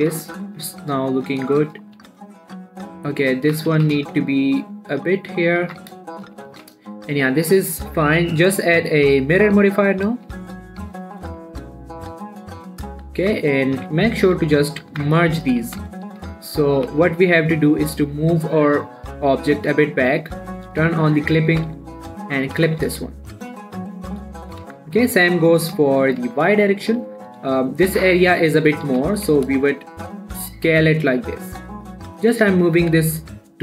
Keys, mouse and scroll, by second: 0.3 shift+middle click, 0.9 Tab, 1.5 shift+middle click, 1.7-2.4 scroll up 3, 2.0 shift+middle click, 2.4 Tab, 3.2 click, 3.5 alt+shift+click, 4.1 g, 4.3 x, 5.9 click, 6.0 Tab, 6.2 scroll down 1, 6.4 shift+middle click, 6.9 ctrl+a, 7.4 click, 11.4 typing, 12.1 click, 13.2-14.8 scroll up 2, 13.5 middle click, 14.8 7, 15.3 Tab, 15.8 shift+middle click, 16.0 z, 16.5 a, 17.0 scroll down 1, 17.2 g, 17.4 x, 19.7 click, 20.0 z, 21.1 click, 21.3-21.9 scroll up 3, 21.9 g, 22.1 x, 22.8 click, 23.0 g, 23.2 x, 23.9 click, 24.2-24.7 scroll down 1, 24.7 shift+middle click, 24.9 shift+scroll down 1, 25.0 Tab, 25.9 click, 26.2 shift+middle click, 26.4 shift+scroll up 1, 26.6 Tab, 27.0 shift+middle click, 28.7-29.3 scroll down 2, 29.3 g, 29.6 y.